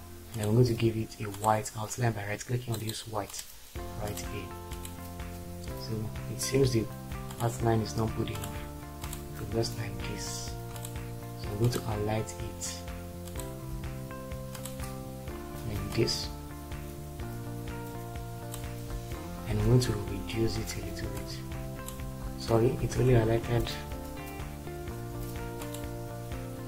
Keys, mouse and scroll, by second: 22.8 ctrl+z.